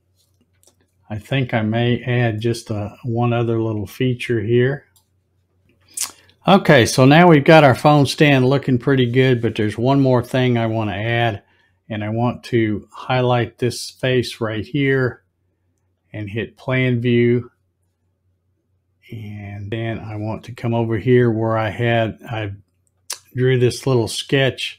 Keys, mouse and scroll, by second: 0.5 z, 2.8-5.0 middle drag, 13.7 click, 15.9 click, 18.9-20.0 scroll up 2, 23.0 click.